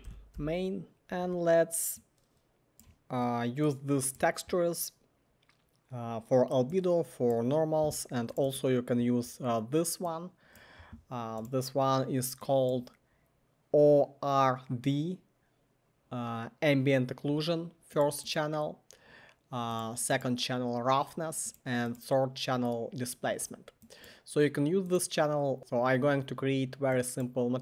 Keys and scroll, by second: 0.0-0.9 typing, 0.9 Return.